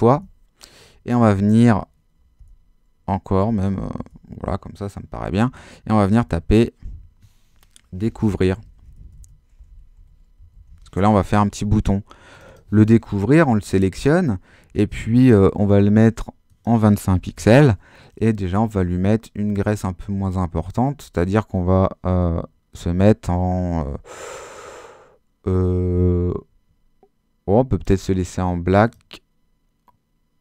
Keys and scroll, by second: 2.4 Return, 4.0 BackSpace, 6.3-11.2 typing, 17.0-17.9 typing.